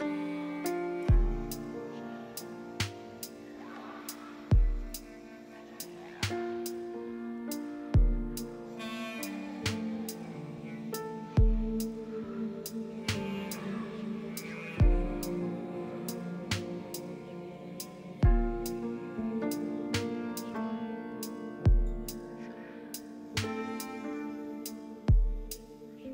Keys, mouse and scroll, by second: 0.1 typing, 0.3 Return, 5.5-6.4 typing, 6.8 Return, 9.6-10.4 typing, 11.8 z, 23.2 g.